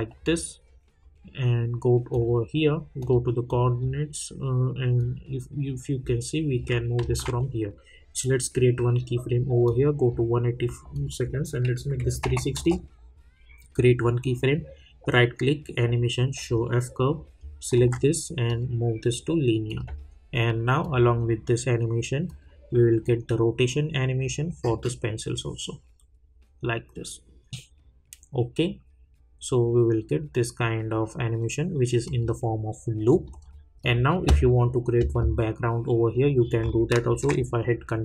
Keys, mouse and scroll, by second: 3.7-5.0 drag, 5.2-6.8 drag, 7.0 ctrl+z, 8.4 click, 12.5 Return, 13.7 click, 14.5 right click, 16.3 click, 17.7 ctrl+a, 18.5 click, 32.0 click, 36.6 click, 37.1 ctrl+r.